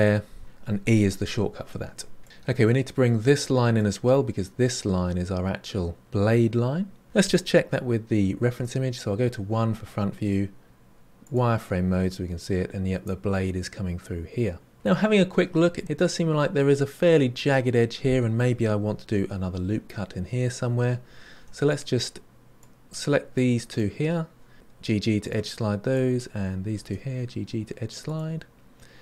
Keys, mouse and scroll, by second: 1.4-2.4 middle drag, 3.7-6.2 middle drag, 11.2 click, 21.6 click, 22.5 click, 22.8 click, 23.3 click, 25.9 click.